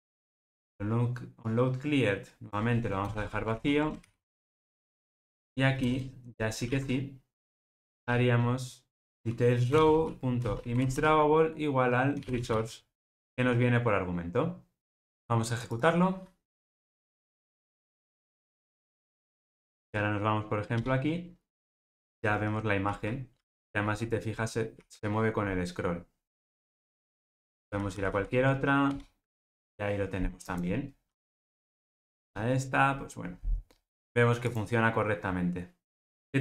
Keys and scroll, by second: 3.5 alt+super+l, 6.6 super+z, 9.0 super+v, 13.0 Return, 15.7 ctrl+r.